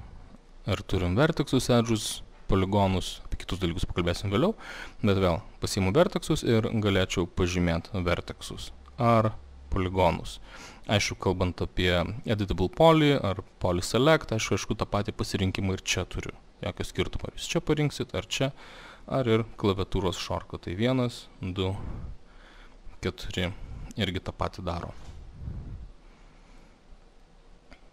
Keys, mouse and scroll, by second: 0.4 click, 4.8 click, 6.1 click, 7.5 click, 10.7 click, 16.8 click, 18.4 click, 19.6 typing, 20.8-25.2 typing, 26.6-27.9 drag.